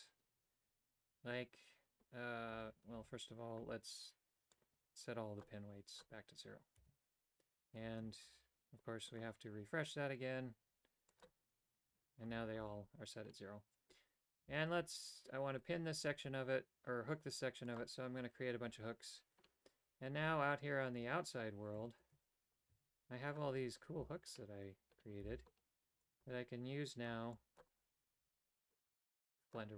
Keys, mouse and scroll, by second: 2.7 a, 3.0 a, 4.6 click, 5.9 click, 6.8 a, 8.4 g, 11.1 click, 12.4 a, 17.7 click, 17.9 typing, 18.9 Tab, 20.3 g, 22.0 shift+right click, 22.9 a, 24.1 v, 25.4 c, 28.3 b.